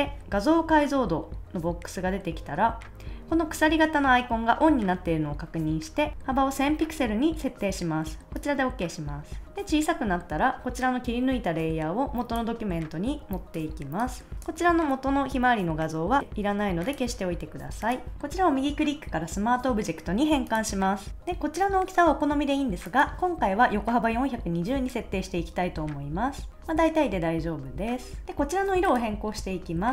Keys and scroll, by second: 6.1 0.